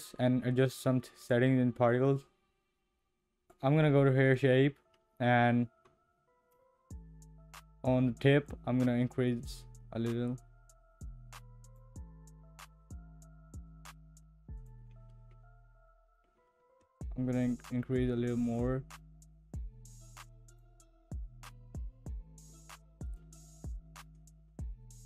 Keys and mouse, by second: 3.5 click, 4.3 click, 8.6-11.8 drag, 16.9-21.2 drag, 23.2-25.0 drag.